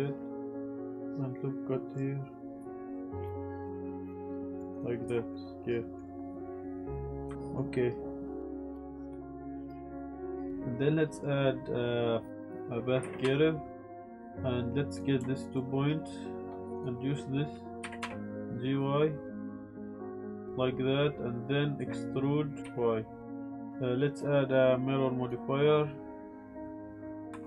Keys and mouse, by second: 1.1 ctrl+r, 3.1 Tab, 3.1 click, 3.2-4.5 typing, 3.4 click, 3.4 ctrl+r, 3.6 click, 4.3 click, 4.4 ctrl+z, 4.7 click, 5.1 Tab, 5.3-6.0 drag, 7.3 click, 7.3 g, 8.4-10.5 typing, 8.6 click, 8.7 click, 9.0 ctrl+z, 9.2 shift+click, 9.4 click, 9.7 click, 9.9 click, 10.1 click, 10.1 drag, 13.0 g, 13.2 y, 13.7 click, 14.0 Tab, 14.2 click, 14.9 click, 15.5 shift+click, 16.7 click, 17.8 g, 18.0 y, 20.4 click, 22.6 y, 23.4 click, 23.6 Tab, 24.1-25.3 drag, 26.5 click.